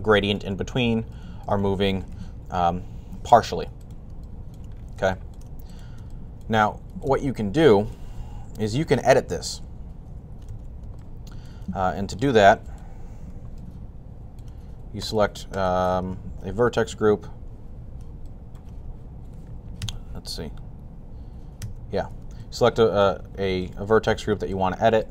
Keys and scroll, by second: 2.0 r, 8.2 typing, 10.3 super+z.